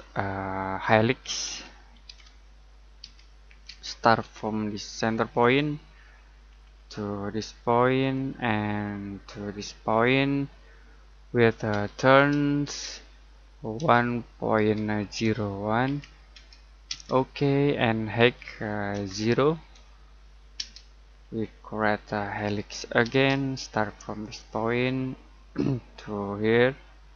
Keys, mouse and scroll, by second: 0.1 middle click, 1.2 typing, 2.8-3.6 typing, 5.4 click, 6.4-8.0 scroll up 1, 8.0 click, 11.7 t, 12.6 space, 13.7 typing, 14.8-15.5 typing, 16.8 space, 18.2 h, 18.9 space, 19.5 0, 20.5 space, 21.1 scroll down 1, 21.8 middle click, 22.3-23.0 scroll up 1, 23.0 space, 24.3 click, 24.7-25.1 scroll down 1, 25.1 middle click.